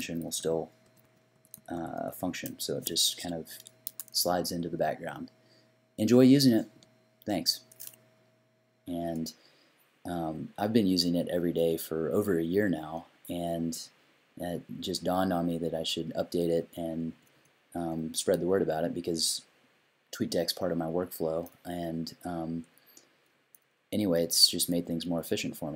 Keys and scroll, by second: 0.8 i, 1.1 i, 11.6 u, 16.6 i, 17.1 u, 17.3 u, 17.8 u, 24.7 i.